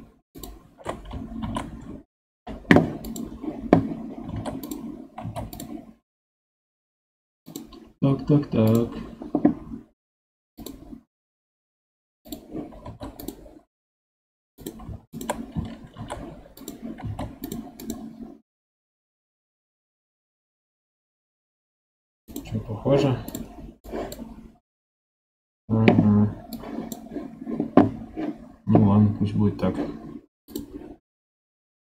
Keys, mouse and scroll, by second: 0.3 alt+shift+click, 1.3 shift+e, 4.2 ctrl+Tab, 4.5 click, 5.1 ctrl+Tab, 7.4 click, 12.8 ctrl+Tab, 14.5 click, 15.0 shift+click, 15.9 shift+e, 17.0 ctrl+Tab, 17.7 click, 18.7-19.5 scroll down 4, 19.5 scroll down 1, 19.7-22.8 scroll up 1.